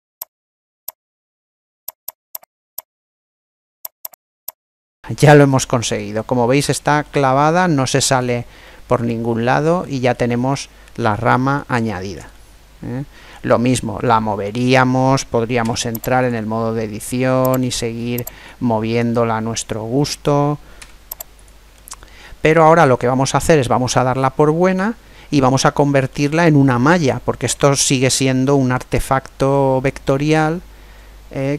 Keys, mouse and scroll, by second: 0.2 click, 0.9 click, 1.5 middle click, 1.9 click, 2.4 click, 3.1 middle click, 3.8 click, 4.7 middle click, 7.0-10.6 middle drag, 10.3-10.9 scroll down 1, 15.3 Tab, 17.4 right click, 19.1 click, 20.5 Tab, 21.5-23.4 middle drag, 23.8-25.2 middle drag, 28.1-30.0 middle drag.